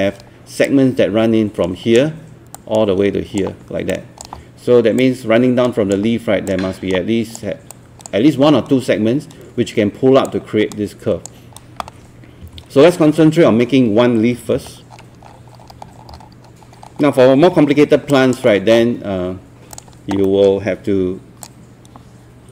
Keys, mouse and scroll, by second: 14.5 Escape, 14.9 scroll down 1, 15.5 scroll up 1, 15.8 scroll down 1, 16.7-17.2 scroll up 1, 17.2 scroll down 1, 17.3-17.9 scroll up 1, 18.1 alt+click, 19.8 click, 20.3 alt+middle click, 21.5-22.5 drag.